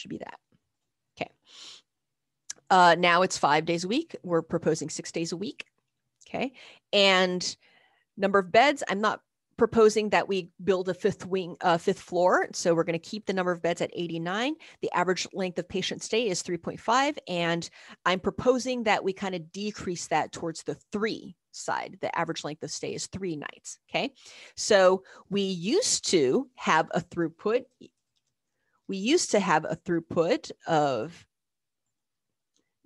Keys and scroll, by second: 0.1 Return, 13.9 Down, 14.1 Down, 14.3 Down, 14.7 Down, 16.8 Right, 27.4-29.1 typing, 32.5 Up, 32.5 Return.